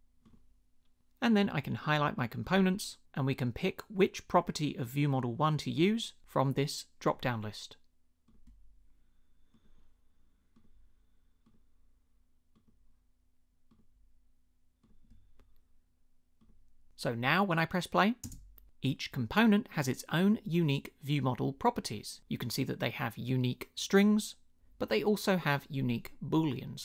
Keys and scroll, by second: 18.2 space.